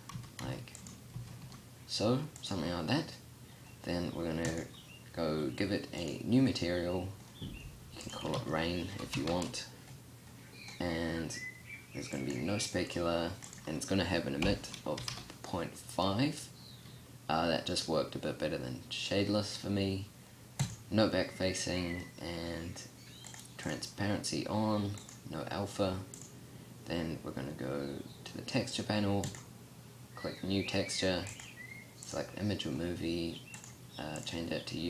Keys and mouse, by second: 0.9 s.